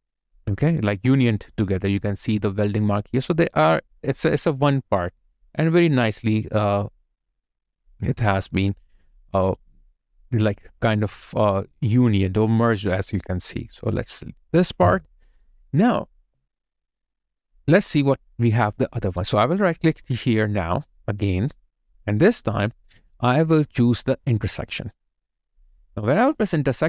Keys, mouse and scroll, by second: 0.9 alt+right click, 4.5 alt+right click, 5.1 alt+click, 5.7 alt+right click, 6.2 alt+click, 6.8 alt+middle click, 7.5 alt+right click, 8.5 alt+middle click, 9.1 alt+click, 9.7 alt+right click, 10.1 alt+middle click, 14.6 Delete, 16.6 alt+middle click, 17.0 alt+click, 17.4 alt+right click, 18.0 alt+middle click, 23.0 right click.